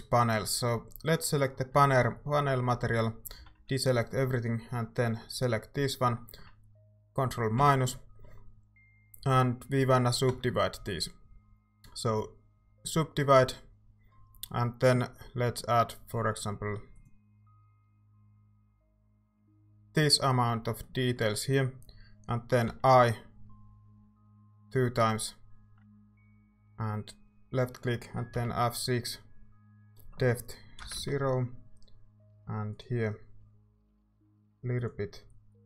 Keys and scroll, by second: 1.8 Tab, 2.9 a, 3.4 a, 3.6 a, 7.6 ctrl+-, 10.3 w, 22.7 i, 24.3 i, 28.3 F6, 30.8 0, 31.0 Return.